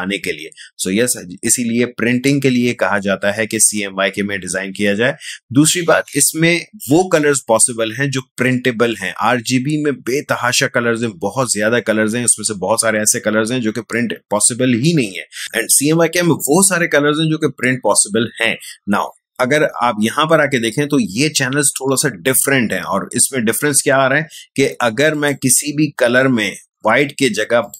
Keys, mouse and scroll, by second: 25.1 click, 27.6 click.